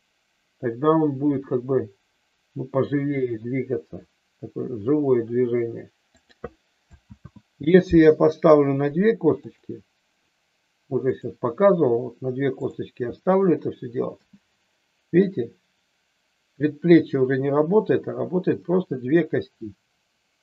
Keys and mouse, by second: 6.1 click, 7.1 ctrl+z, 12.6 click, 14.1 g.